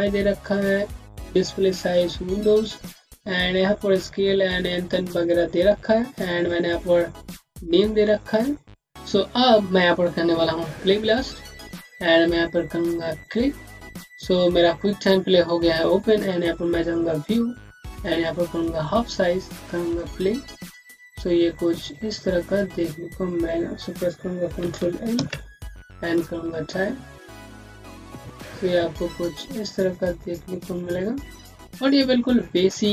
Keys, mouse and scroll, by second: 2.2-3.4 scroll down 1, 7.4 click, 8.9-10.8 scroll down 1, 10.8 click, 16.3 click, 22.3 click, 25.0 ctrl+l, 26.0 click.